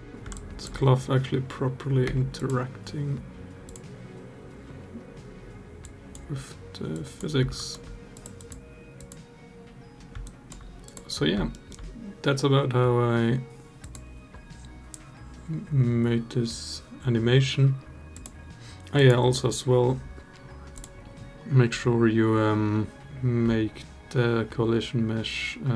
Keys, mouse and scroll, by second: 0.1 alt+drag, 1.8 space, 2.1 click, 3.4 click, 7.3 alt+drag, 8.8 click, 10.0 alt+drag, 11.3 alt+middle drag, 18.0 -, 18.7 click, 20.5 click, 23.1-25.5 drag.